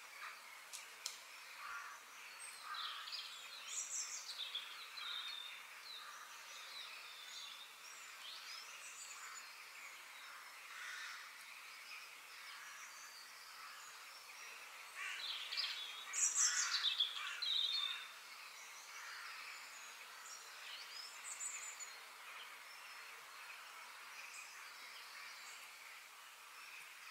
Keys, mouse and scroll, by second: 4.9 middle click, 5.8-6.2 scroll up 2, 6.8 scroll down 2, 7.3-9.2 middle drag, 9.7-11.7 middle drag, 12.9 click, 13.5 ctrl+z, 14.3 f, 16.5-19.9 middle drag, 22.1-25.3 middle drag, 25.3 KP_3, 26.7-27.1 scroll up 3.